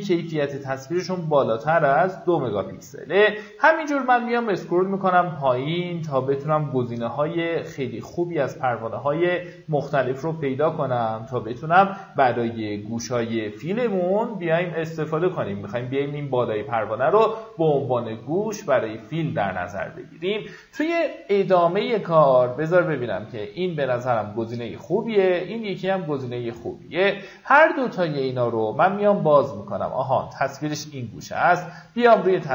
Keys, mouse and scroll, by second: 4.8 middle click, 5.5-6.0 scroll down 1, 6.5 middle click, 13.0 scroll down 1, 13.1-14.2 scroll up 1, 21.0 click, 22.1 middle click, 22.9 click, 24.0 middle click, 26.4 click, 27.3-27.7 scroll down 1, 28.5-29.3 scroll up 1, 29.7 right click, 30.6 click.